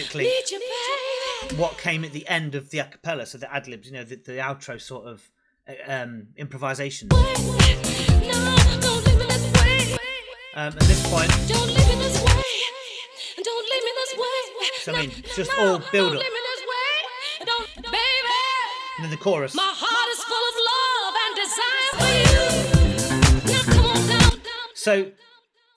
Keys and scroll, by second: 1.3 space, 6.9 space, 9.8 space, 14.8 space, 17.5 space, 24.1 space.